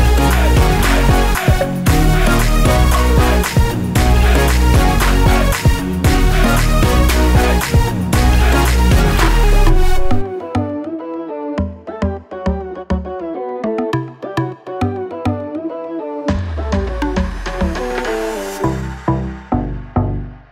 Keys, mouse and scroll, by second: 0.6 1, 1.0 ., 2.9 click, 6.0 click, 8.3 click, 9.6 click, 13.4 click, 14.0 scroll up 1, 14.9 scroll down 1, 16.9 scroll up 1, 17.5 scroll down 1, 18.2 scroll up 1, 19.1-19.5 scroll down 1, 19.5 scroll up 1, 19.8 scroll down 1, 20.1 scroll up 1.